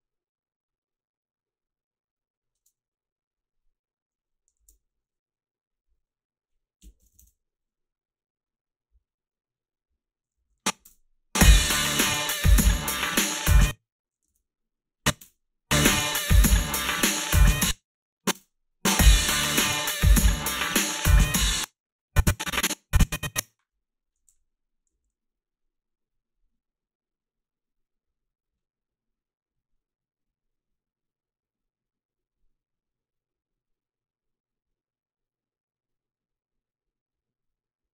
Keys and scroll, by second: 2.5 space, 6.6-7.6 typing, 10.5 a, 10.8 space, 13.4 space, 15.2 space, 17.4 space, 18.3 space, 21.4 space, 24.2 h, 24.9 a.